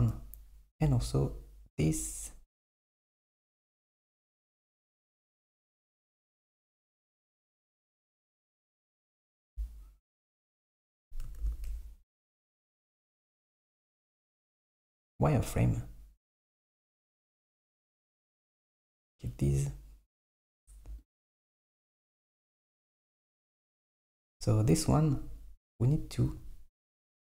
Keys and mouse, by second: 0.9 Tab, 5.1 alt+z, 7.5 Tab, 8.8 super+middle click, 9.4 KP_1, 11.5 alt+z, 14.9 click, 18.5-20.5 drag, 21.0 alt+click, 23.1 click.